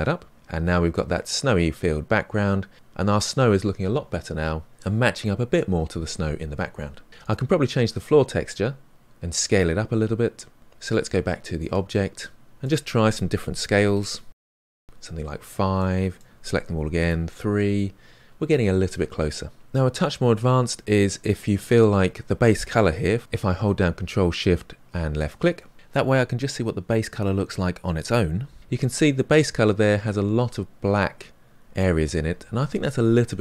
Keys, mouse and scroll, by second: 0.7-2.7 middle drag, 2.7 click, 7.3 click, 14.6-19.6 drag, 25.2 ctrl+shift+click.